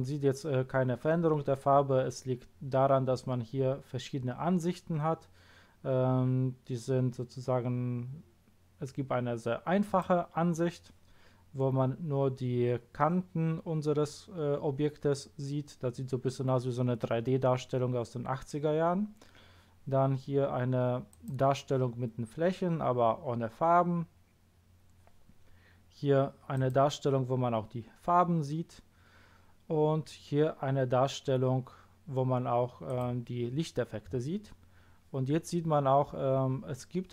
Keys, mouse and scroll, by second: 9.8 click, 21.1 click, 26.5 click, 32.8 click.